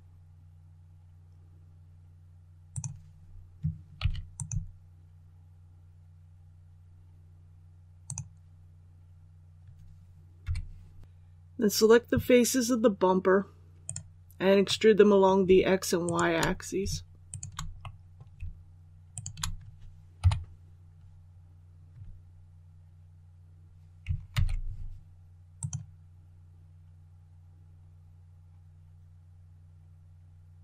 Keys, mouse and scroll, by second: 4.3 click, 10.4 3, 13.8 right click, 14.6 middle click, 15.9 shift+right click, 17.2 shift+right click, 17.7 middle click, 19.1 shift+right click, 20.1 KP_7, 21.2-21.5 scroll down 1, 22.2 ctrl+z, 24.2 alt+e, 25.5 click.